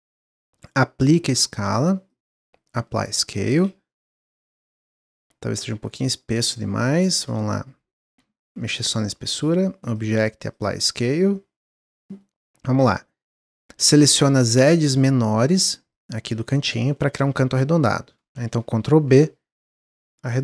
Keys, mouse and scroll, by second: 1.1-3.3 drag, 3.3-6.2 middle drag, 6.2-7.3 drag, 8.3 ctrl+z, 8.6 click, 9.9-12.0 drag, 12.0 middle click, 12.3 Tab, 13.2 middle click, 13.6 2, 13.8 click, 14.7 shift+click, 15.0 middle click, 15.8 shift+click, 16.6 shift+click, 16.9 middle click, 17.5 ctrl+g, 19.0 ctrl+b.